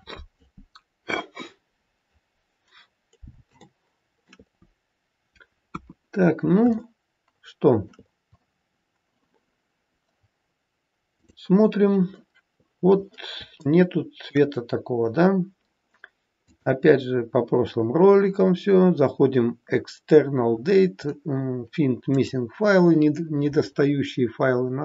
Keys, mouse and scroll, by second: 3.5 shift+middle click, 4.8-5.7 scroll down 1, 5.7 KP_1, 6.7 shift+middle click, 11.5 click, 13.5 shift+middle click, 16.3 click.